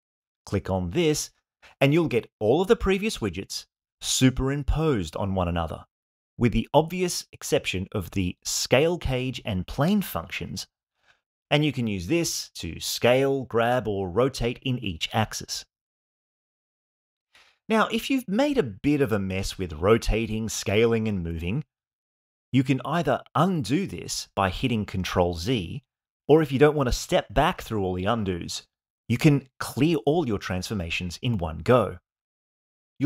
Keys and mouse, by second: 11.5-12.5 drag, 13.1-13.8 drag, 14.3-15.0 drag, 15.4-15.9 drag, 16.4-17.0 drag, 17.6-18.3 drag, 25.5 ctrl+z, 26.3 ctrl+z, 27.1 ctrl+z, 27.9 ctrl+z, 28.8 ctrl+z.